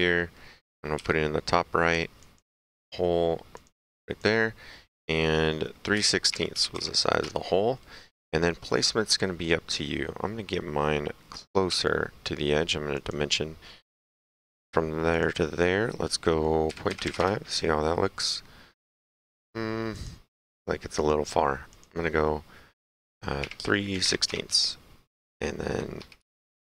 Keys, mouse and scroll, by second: 0.2 middle click, 1.0 s, 2.3 click, 3.6 click, 6.0 KP_3, 7.3 Return, 9.3 middle click, 13.0 click, 15.2 click, 16.9 KP_2, 17.2 Return, 20.0 click, 21.0 click, 23.1 KP_3, 24.1 KP_6, 24.3 Return, 26.0 Escape.